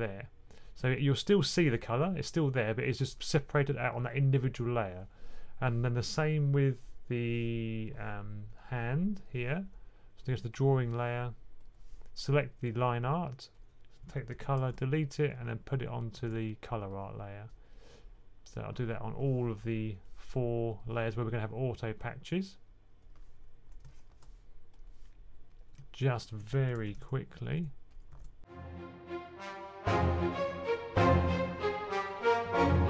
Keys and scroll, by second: 14.2 super+c, 14.5 super+x, 16.0 super+v, 26.7 super+c, 26.8 x, 28.0 super+v, 29.4-30.7 typing, 32.0-32.8 typing.